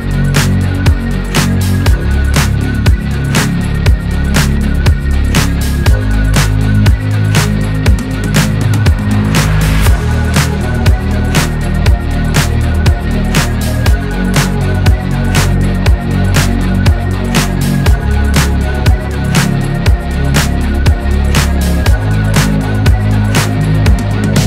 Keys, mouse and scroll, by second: 0.7-1.8 drag, 2.3-3.1 scroll up 9, 2.7 shift+middle click, 3.3 click, 4.3-5.2 scroll up 4, 4.6 a, 5.2-6.5 drag, 6.5 scroll down 11, 8.2 KP_1, 8.8 s, 11.8 scroll down 4, 12.1 alt+z, 13.3 click, 13.7 shift+middle click, 14.3-15.3 drag, 15.3 scroll up 3, 15.4 click, 15.8 right click, 16.5 shift+middle click, 16.8-17.6 scroll down 3, 17.6-19.0 drag, 20.1 ctrl+z, 20.4 click, 20.6-20.9 scroll up 1, 20.9 s, 21.5 shift+middle click, 21.8 scroll down 1, 22.1 click, 22.8 shift+middle click, 23.0 scroll up 6, 23.3 s.